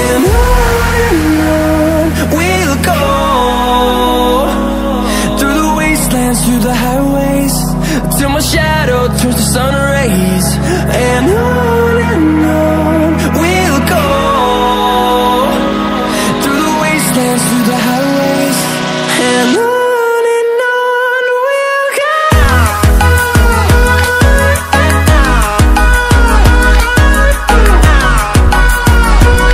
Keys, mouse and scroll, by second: 1.6-2.6 drag, 3.3 ctrl+alt+scroll up 1, 4.2-9.9 drag, 15.5 ctrl+w, 18.0 ctrl+w, 19.1-27.0 drag, 27.0 ctrl+alt+scroll up 1.